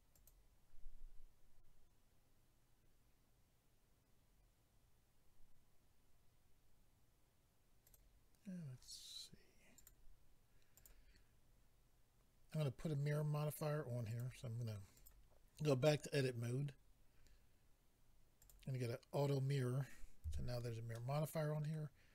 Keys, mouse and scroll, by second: 0.1 click, 0.3 click, 7.8 click, 7.9 click, 9.7 click, 9.9 click, 10.7 click, 10.8 click, 14.1 click, 14.9 click, 16.7-17.8 scroll down 4, 18.4 click, 20.2 a, 20.9 middle click.